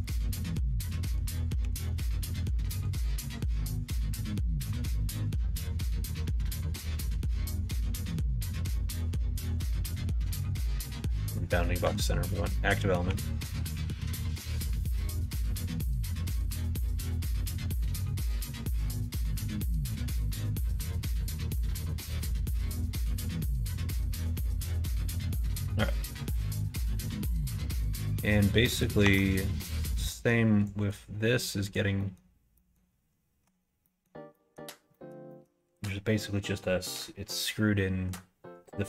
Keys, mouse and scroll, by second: 1.6 2, 3.4 s, 10.9 ctrl+z, 13.0 s, 15.0 g, 18.7 middle click, 19.9 g, 21.6 middle click, 28.7 click, 29.0 Tab, 29.3 click, 30.1 middle click, 30.6 click, 31.2 middle click, 31.6 click, 31.9 middle click, 32.5 middle click, 33.4 Tab, 33.8 middle click, 34.3 middle click, 34.9 middle click, 35.2 middle click.